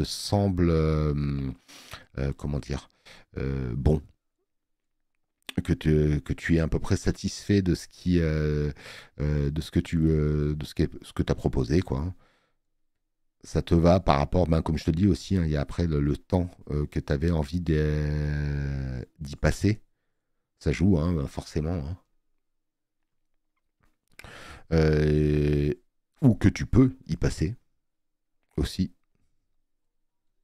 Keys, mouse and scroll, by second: 25.7 space, 25.8 click.